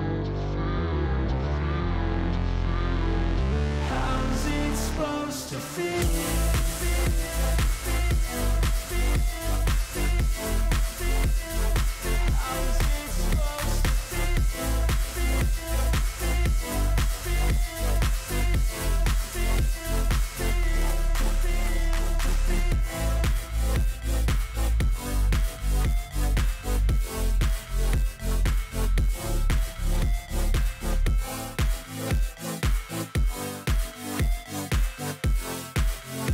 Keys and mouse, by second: 1.9-3.0 drag, 6.0-7.4 drag, 9.8-11.1 drag, 12.6 alt+shift+click, 14.4-15.9 drag, 18.8-20.0 drag, 23.6-25.1 drag, 27.6-29.1 drag, 30.7 click, 34.0-35.2 drag.